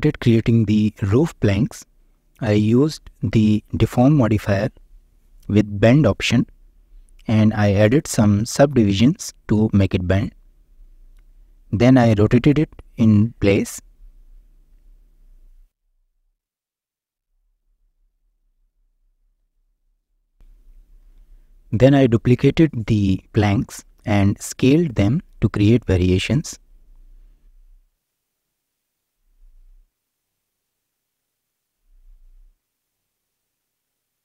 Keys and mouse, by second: 1.2 click, 1.9 ctrl+a, 3.2-5.2 drag, 6.0 click, 7.1 click, 7.8 click, 7.9 right click, 8.5 shift+middle click, 8.7 Tab, 9.2 ctrl+r, 11.3 Tab, 11.8 drag, 12.5 click, 13.2 r, 13.5 x, 14.8 middle click, 15.3 click, 15.7 shift+middle click, 15.9 click, 16.4 shift+d, 16.5 click, 17.5 ctrl+z, 18.0-18.8 drag, 20.0 g, 20.0 click, 21.8 shift+d, 21.8 drag, 22.1-22.5 drag, 22.5 g, 23.6 click, 25.4 shift+click, 25.7 s, 26.1 z, 26.3 z, 27.6-28.6 drag, 29.4 s, 29.6 z, 29.7 z, 30.7 click, 31.6-32.1 drag, 32.1 s, 32.3 z, 32.3 z, 33.9 shift+middle click.